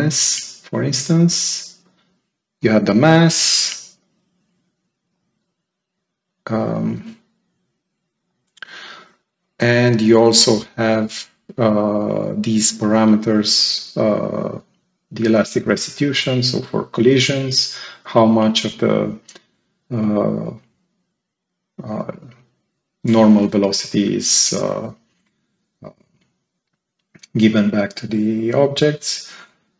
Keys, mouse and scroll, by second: 3.5 click, 5.0 right click, 7.3 click, 8.2 right click.